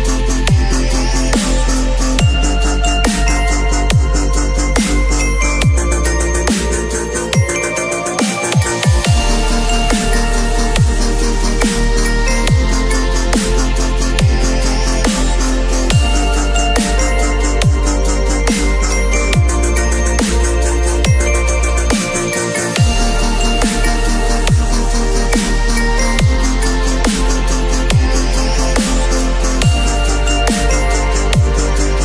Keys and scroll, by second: 4.5 v, 5.0 ctrl+[, 6.8 b, 7.8 ], 17.3 [, 23.4 v.